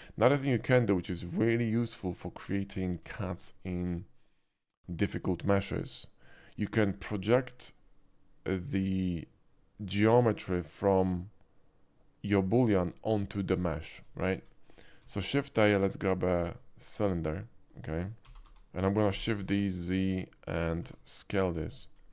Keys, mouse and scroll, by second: 0.6 middle click, 2.9 scroll down 1, 3.1 shift+middle drag, 3.6-4.0 shift+middle drag, 14.2 middle drag, 15.0 shift+a, 17.2 click, 18.4 g, 18.5 y, 19.1 shift+d, 19.4 z, 20.5 click, 20.8 s, 21.5 click, 21.9 middle click.